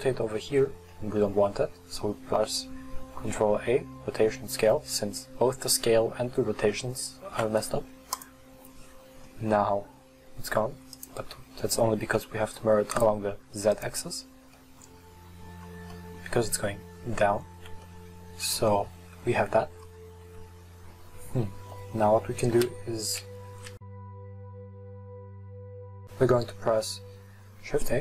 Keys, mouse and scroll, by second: 1.2 ctrl+a, 7.3 ctrl+a, 11.0 click, 13.8 click, 14.6-15.2 middle drag, 15.2-16.0 scroll down 2, 16.0-22.6 middle drag, 22.6 KP_1, 24.0 shift+a.